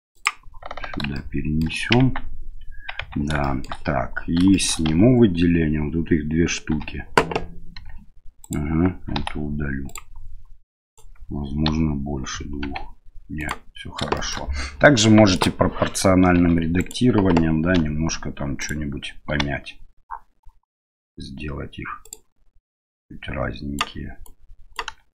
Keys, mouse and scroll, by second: 1.1 shift+middle click, 2.0 Tab, 3.0 Tab, 3.4 shift+middle click, 4.5 shift+middle click, 4.9 a, 6.7 l, 7.8 g, 9.2 Delete, 10.8 right click, 11.7 l, 12.6 g, 14.2 shift+middle click, 15.4 click, 16.4 1, 16.8 right click, 17.8 g, 19.3 g, 23.0 right click, 24.2 right click.